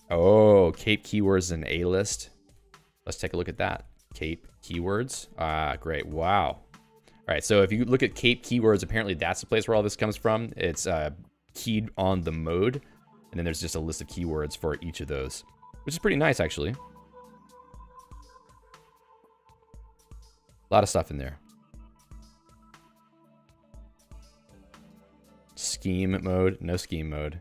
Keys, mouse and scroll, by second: 4.3-5.3 typing, 6.7 Down, 7.2 Down, 9.6 Down, 10.3 Right, 10.6 Right, 11.0-12.0 Right, 12.3 Left, 12.6 Left, 12.8-13.8 Down, 14.0 Down, 15.4 Page_Down, 16.5 Page_Down, 16.9 Page_Down, 18.1 Page_Down, 18.8 Up, 19.2-20.5 Up, 24.6 Up, 25.4 ctrl+s, 25.4-27.4 typing, 26.7 ctrl+g, 27.1 ctrl+s.